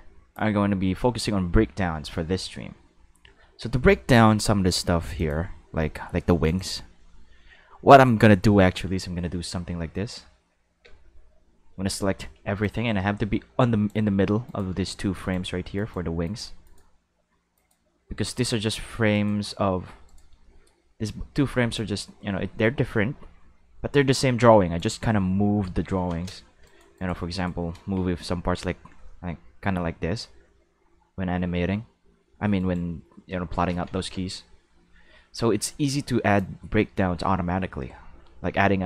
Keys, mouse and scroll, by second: 5.2 click, 6.5 click, 10.0 Tab, 10.8 a, 12.6-13.9 drag, 14.5 right click, 15.2 shift+right click, 15.7 shift+right click, 16.2 shift+right click, 16.6 shift+right click, 17.5 shift+right click, 18.3 shift+right click, 19.1 shift+right click, 20.1 right click, 20.4 shift+middle click, 21.7-24.8 drag, 27.3 shift+right click, 27.8 g, 29.0 middle click, 32.6 right click, 33.7 ctrl+z, 35.6-36.4 drag.